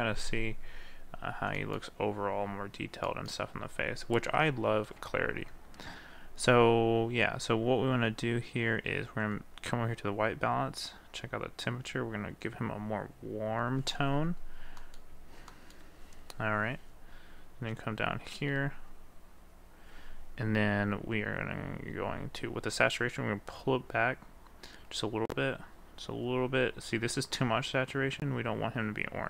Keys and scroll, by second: 5.0 ctrl+z.